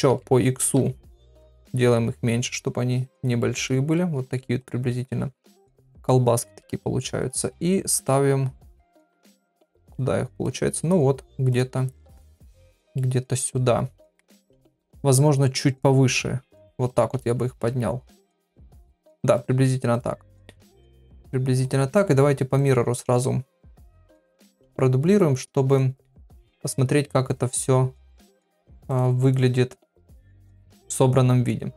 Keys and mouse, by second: 3.6 middle click, 4.2 click, 4.6 click, 4.9 middle click, 5.6 KP_3, 6.4 g, 7.5 middle click, 8.6 click, 9.5 middle click, 10.5 click, 11.9 middle click, 12.9 middle click, 14.4 KP_3, 15.4-16.7 drag, 16.9 click, 17.2 middle click, 18.0 click, 18.3 ctrl+a, 19.3 click, 20.3-21.3 middle drag, 21.6 click, 22.5 click, 23.9 click, 25.7 click, 26.5 click, 28.8 click, 29.2 click, 30.0-31.7 middle drag.